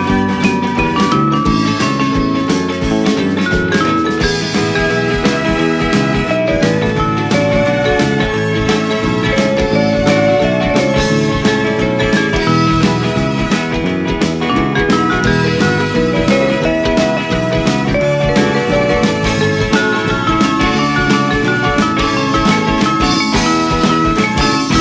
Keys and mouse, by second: 0.4 click, 0.8 middle click, 1.2 g, 1.4 z, 4.0 click, 4.8 KP_3, 5.9 r, 7.5 click, 8.0 Tab, 8.4 middle click, 10.2 click, 10.6 Tab, 11.5 g, 12.0 z, 12.7 click, 13.0 Tab, 13.3 middle click, 14.7 shift+a, 16.6 click, 17.5 g, 18.3 z, 20.2 click, 20.4 g, 20.6 z, 21.8 click, 22.2 middle click, 23.4 middle click, 24.3 Tab.